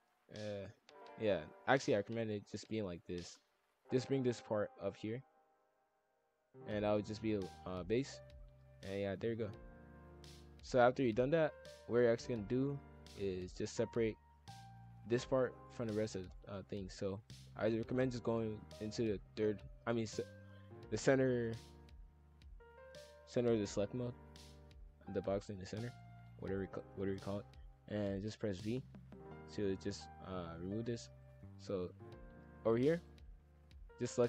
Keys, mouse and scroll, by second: 0.2-0.5 ctrl+z, 1.1 scroll up 1, 1.4-1.8 middle drag, 1.8 scroll up 1, 2.1 ctrl+z, 2.7 ctrl+shift+z, 3.3 scroll up 1, 3.4 middle click, 3.9 click, 4.2 click, 4.9 click, 6.3 middle click, 6.6-7.3 scroll down 1, 7.3-8.4 middle drag, 8.4 ctrl+l, 8.8 KP_5, 8.9 KP_1, 9.2 scroll down 1, 9.6 shift+middle click, 10.4 scroll up 1, 10.4-12.0 middle drag, 12.0 scroll up 1, 12.3 middle click, 12.7-13.1 scroll up 3, 13.1-16.1 middle drag, 17.1-20.3 drag, 25.8 click, 26.6 alt+click, 27.1 alt+click, 28.1-28.6 middle drag, 28.6 v, 30.4 scroll up 1, 30.5-31.4 middle drag, 31.4 scroll up 1, 31.6 middle click, 32.2-32.9 scroll down 1, 32.9 click, 33.6 alt+click.